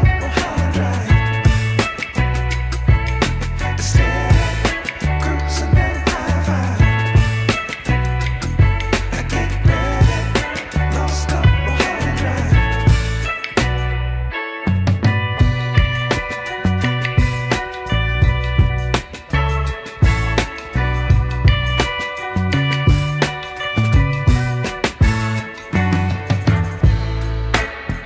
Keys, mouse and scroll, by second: 3.4-6.1 drag, 7.1-9.9 drag, 10.9-13.9 drag, 14.7-21.7 drag, 22.5-24.2 drag, 24.5 click, 24.9-26.1 scroll down 2, 25.4-28.0 middle drag.